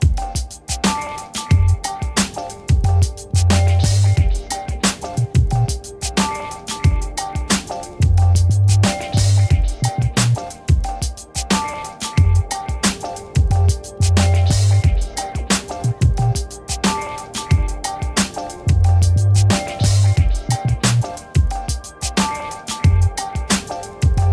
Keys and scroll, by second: 8.6-11.3 typing.